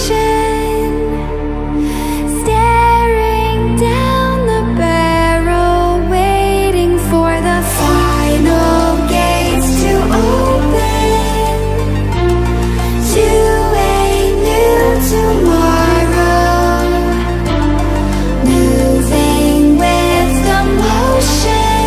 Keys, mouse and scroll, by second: 0.1-1.8 drag, 12.8-13.5 ctrl+scroll down 1, 13.5 ctrl+alt+scroll up 1, 14.2-17.1 drag.